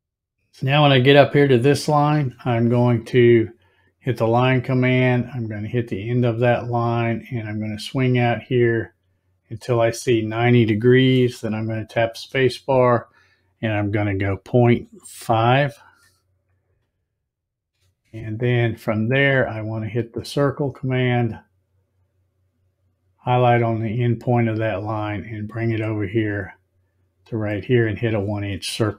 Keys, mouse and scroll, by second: 4.1 click, 6.7 click, 12.0 space, 19.5 click, 25.0 click, 27.7 click.